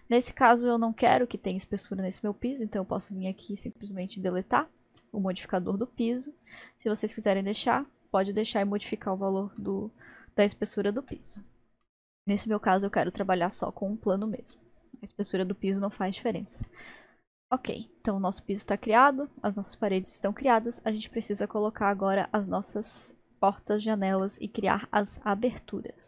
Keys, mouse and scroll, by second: 3.5-5.0 drag, 5.0 middle click, 5.9-8.0 middle drag, 9.6-11.4 middle drag, 11.4 click, 11.8-24.4 middle drag.